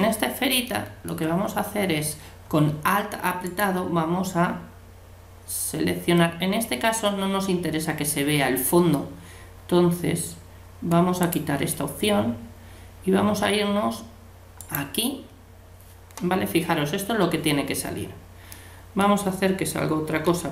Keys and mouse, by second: 0.0-2.4 middle drag, 3.5-5.2 right drag, 11.2-13.2 drag, 14.6-16.5 right drag, 18.5 middle click, 20.3 a.